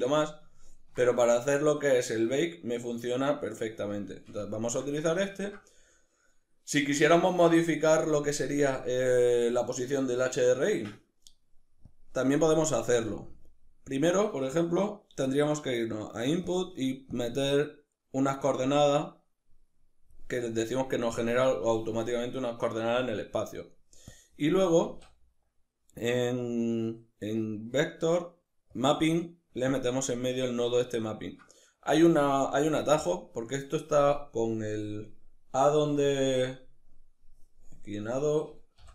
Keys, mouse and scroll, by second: 11.5 click, 12.5 shift+a, 16.8 click, 18.3 click, 23.1-23.7 middle drag, 23.7 click, 24.5 shift+a, 29.4 click, 34.3-38.9 drag.